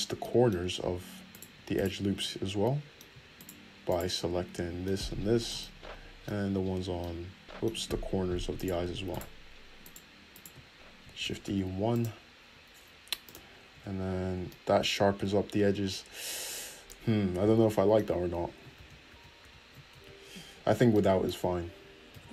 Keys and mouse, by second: 1.4 click, 1.6 shift+middle click, 1.9 shift+click, 2.0-3.5 shift+middle drag, 3.5 shift+click, 3.7-6.8 shift+middle drag, 8.7 shift+middle click, 9.2 shift+middle click, 9.9 shift+middle click, 10.5-13.4 shift+middle drag, 11.4 shift+e, 13.4 click, 13.5-17.7 middle drag, 13.9 Tab, 19.0 ctrl+z, 19.4 ctrl+z, 19.6 ctrl+z, 20.1 Tab.